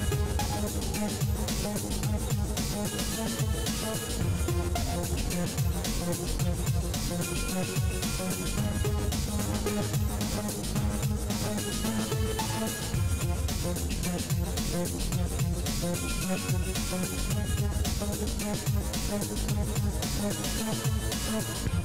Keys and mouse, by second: 0.1 e, 1.8 KP_3, 3.2-4.5 drag, 5.1 right click, 6.5-8.1 drag, 8.1-9.7 right drag, 9.0 f, 9.3 f, 9.7 ctrl+s, 10.4 middle click, 11.9 ctrl+r, 15.7 click, 15.7-21.6 right drag, 18.9 ctrl+z, 19.3 f, 20.8 f, 21.2 ctrl+s.